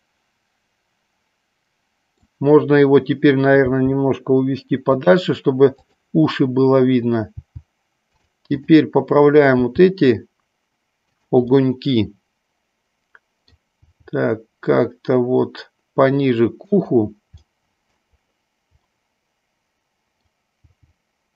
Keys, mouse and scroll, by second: 3.7 g, 5.9 click, 7.4 g, 8.6 click, 9.6 g, 11.1 click, 11.6-13.7 middle drag, 13.9 g, 17.5 middle click, 19.1-20.3 middle drag, 20.6 g.